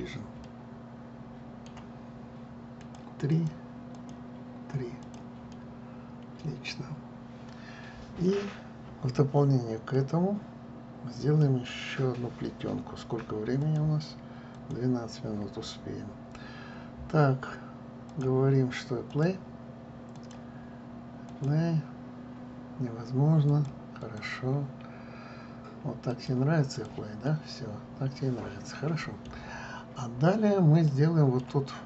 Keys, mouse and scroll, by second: 1.1-3.5 middle drag, 3.5 click, 4.0-5.4 drag, 5.7 click, 6.2-9.2 middle drag, 9.3 scroll up 2, 10.6-12.3 middle drag, 12.3-12.6 scroll down 3, 18.8 click, 19.8-21.0 drag, 22.0-27.0 drag, 27.4 click, 27.9-30.3 middle drag, 30.3 scroll down 1, 30.8-31.6 scroll up 4, 31.6-31.8 middle drag.